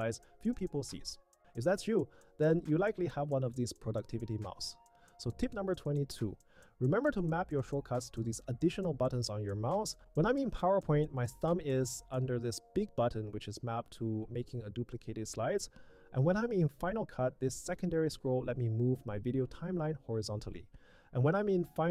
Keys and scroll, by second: 1.6 Down, 21.0 Tab.